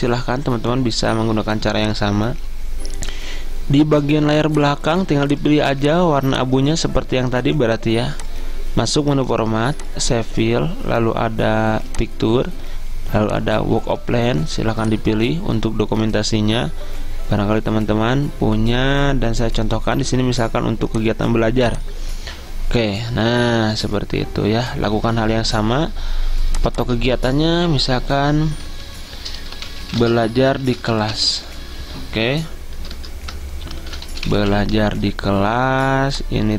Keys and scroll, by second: 28.0-35.0 typing.